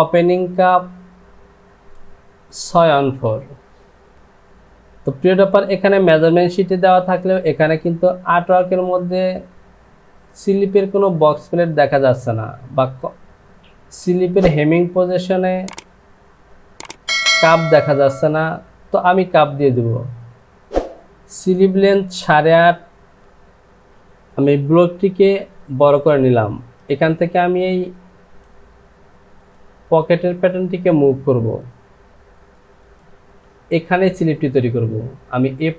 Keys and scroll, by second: 24.9 Home.